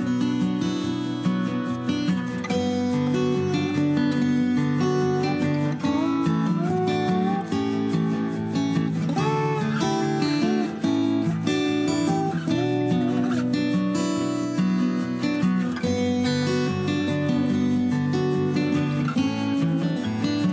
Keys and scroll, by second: 2.0 m, 4.6-6.5 typing, 8.8-9.8 typing, 10.5 Escape, 11.1 typing, 15.0 l, 15.6 Escape, 16.8 Escape, 17.6 space, 18.9-20.4 typing.